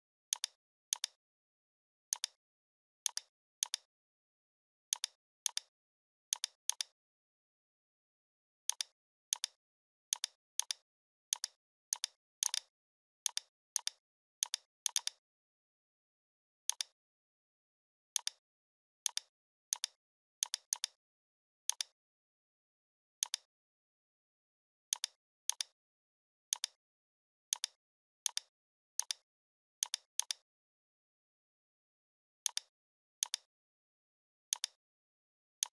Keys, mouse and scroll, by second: 8.5-13.6 drag, 15.9 right click, 16.7 click, 17.7 right click, 18.2 click, 18.2 click, 18.7 right click, 19.1 click, 20.4-21.2 shift+click, 21.4-21.7 scroll up 1, 21.7-22.7 click, 22.8-23.2 scroll down 1, 23.2-23.7 drag, 24.5 Down, 24.9-25.4 click, 25.7-26.1 scroll down 1, 26.5-27.0 click, 27.2 scroll down 1, 27.5 space, 27.6-28.0 click, 27.7 space, 28.0-28.3 scroll up 1, 28.3-28.8 click, 29.5 ctrl+z, 29.8-30.7 drag, 31.4 right click, 32.5-34.1 drag.